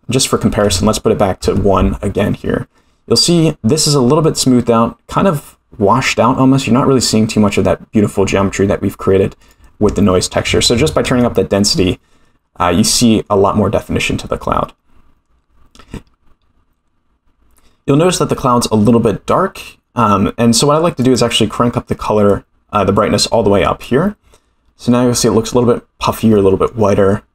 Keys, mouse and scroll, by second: 9.4-11.8 drag, 12.7-13.3 middle drag, 18.1-18.5 middle drag, 19.3 scroll down 1, 21.0 click, 25.1-25.5 middle drag, 26.3-26.6 middle drag.